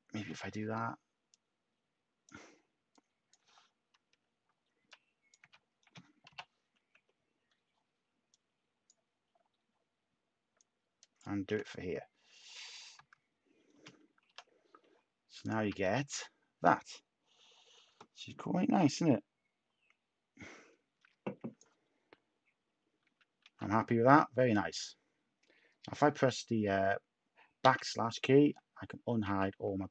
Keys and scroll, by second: 0.1 x, 0.7 /, 4.0 Tab, 5.3 x, 6.3 /, 6.9 Tab, 11.5 u, 12.6-14.2 typing, 15.3-16.0 typing, 23.4 a, 27.6 \, 29.2 a.